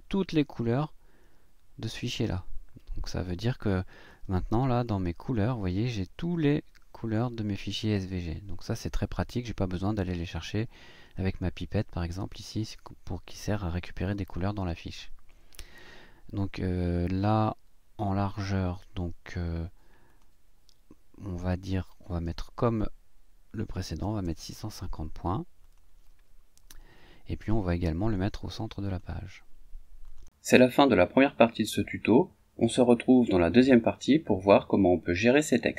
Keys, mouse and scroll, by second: 4.8 click, 20.1 click, 21.5 click, 23.8 6, 24.0 KP_5, 24.2 KP_0, 25.6 click, 28.8 click, 30.1 click.